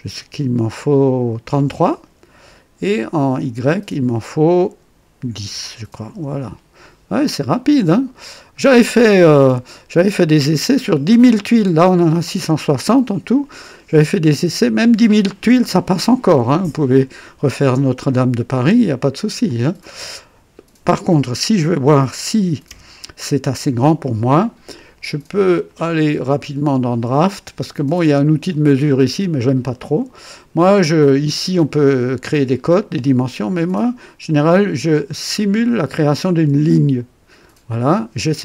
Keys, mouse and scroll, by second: 1.4 KP_3, 1.6 KP_3, 3.4 click, 5.2 KP_1, 5.5 KP_0, 5.7 KP_0, 6.1 Return, 7.5 scroll down 1, 8.5-9.5 right drag, 9.9-11.0 drag, 18.1-19.3 right drag, 19.5-21.1 drag, 22.6 KP_2, 23.4-24.2 right drag, 25.5 click, 26.8 click, 36.7 click.